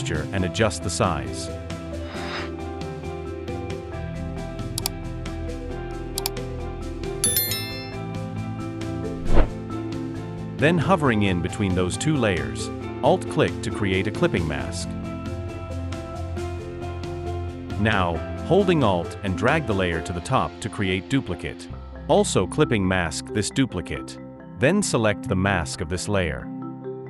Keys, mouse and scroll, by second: 3.7-4.3 alt+scroll down 1, 5.7 alt+shift+click, 12.8 alt+click, 18.7 alt+click, 22.1 alt+click.